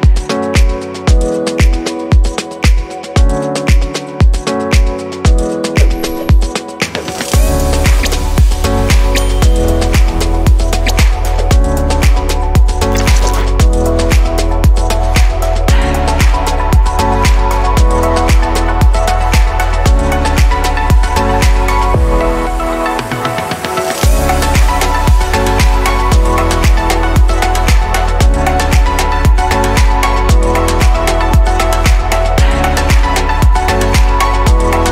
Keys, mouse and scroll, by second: 0.0 right click, 0.5 click, 1.3 click, 3.9 drag, 5.0 ctrl+z, 6.0 shift+click, 7.3 Delete, 8.3 click, 10.4 ctrl+z, 12.1 click, 14.0 click, 15.4 click, 16.0 Delete, 16.9 click, 21.3-22.2 middle drag, 22.2 click, 23.2 click, 24.0 click, 25.1 click, 25.6 click, 26.9-30.1 right drag.